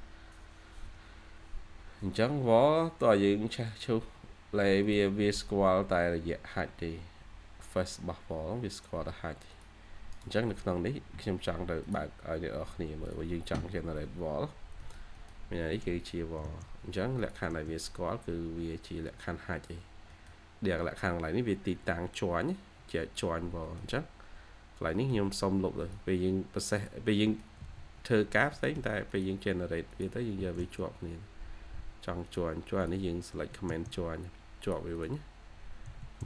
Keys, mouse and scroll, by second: 10.0 right click, 14.0-14.4 scroll up 1, 14.7 middle click, 17.9-18.2 scroll down 1, 18.2 1, 18.3 scroll, 18.4-18.9 scroll up 2, 18.6 1, 18.9-19.3 scroll, 19.3-20.0 scroll up 2, 19.7 1, 20.0 1, 20.4-20.8 scroll up 1, 21.9-22.9 scroll up 1, 23.1 scroll up 1, 23.2 scroll down 1, 23.5 middle click, 24.8 middle click, 25.0 scroll down 1, 27.1 middle click, 27.3-28.2 typing, 28.4 Escape, 28.6 Escape, 30.8 scroll up 1, 31.4 scroll up 1, 31.7 typing, 34.8 double click, 35.8 typing.